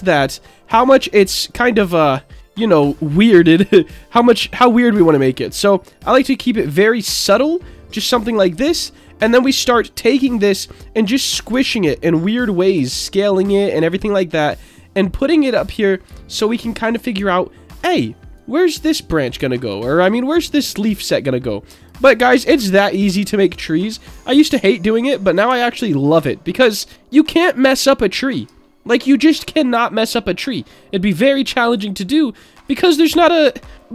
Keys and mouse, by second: 1.5-7.4 drag, 8.2 click, 9.9 s, 10.5 click, 11.5 s, 11.7 z, 12.5 click, 12.7 s, 13.1 click, 14.4-15.4 drag, 16.1 shift+middle click, 17.3 alt+middle click, 18.3 click, 19.5 alt+middle click, 20.6-21.8 drag, 22.5 s, 23.1 click, 24.2-25.3 drag, 25.6 alt+middle click, 27.7 middle click, 28.6 shift+middle click, 29.4-31.0 middle drag, 31.7 click, 33.0 middle click, 33.6 alt+middle click.